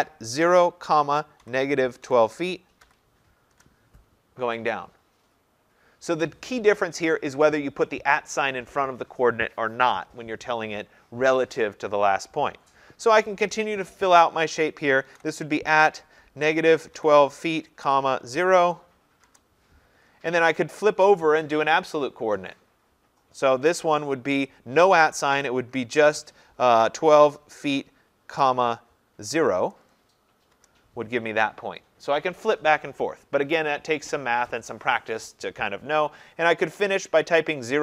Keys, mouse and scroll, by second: 0.2-2.9 typing, 3.5 Return, 15.1 typing, 16.2-18.4 typing, 19.3 Return, 26.9-29.2 typing, 30.6 Return, 35.3 Return.